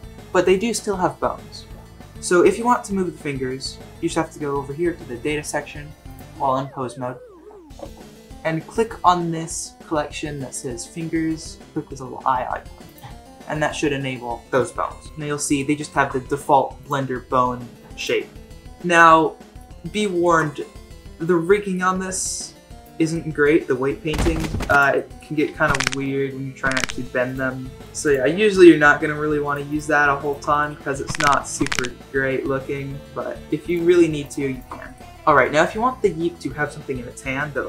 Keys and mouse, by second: 12.9 click, 15.6-15.9 shift+middle drag, 18.7-19.6 middle drag, 20.2 shift+middle drag, 20.5-21.7 middle drag, 22.3-22.8 drag, 23.1-23.4 middle drag, 23.7 r, 24.9 middle click, 25.4 r, 27.8 r, 28.0 click, 28.4 shift+middle drag, 28.7 middle click, 28.8 r, 29.7 click, 30.5 middle click, 30.7 r, 34.5 shift+click, 34.8 middle click.